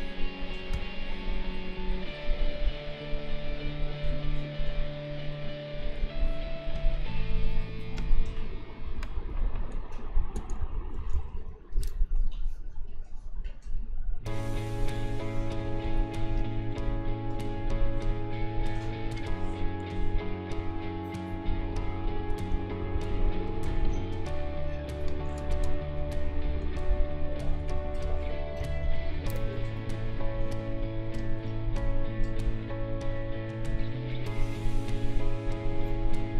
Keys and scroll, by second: 8.2 l, 10.3 space, 10.6 a, 11.3 Return, 15.8 ctrl+s, 22.1 m, 23.9 n, 25.3 space, 25.5 -, 25.6 space, 25.9 k, 28.6 a.